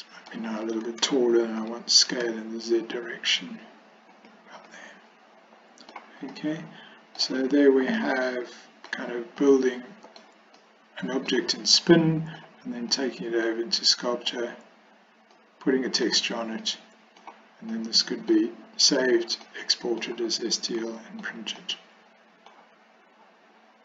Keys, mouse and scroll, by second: 1.7 s, 4.8-6.0 middle drag, 6.4-7.3 middle drag, 8.2-9.0 middle drag, 9.5-10.3 middle drag, 10.6-11.4 middle drag, 11.8-12.5 middle drag, 13.0-13.5 middle drag, 15.4-16.1 middle drag, 16.7-17.3 middle drag, 17.9 middle click, 19.5 middle click, 20.9-21.3 shift+middle drag, 21.7-22.6 middle drag.